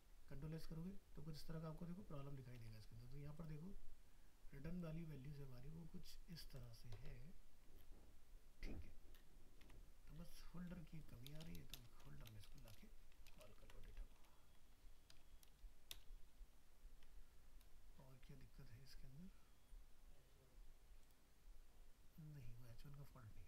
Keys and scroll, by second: 2.6 alt+Tab, 9.6 alt+Tab, 13.6 ctrl+x, 14.0 ctrl+End, 16.2 ctrl+v.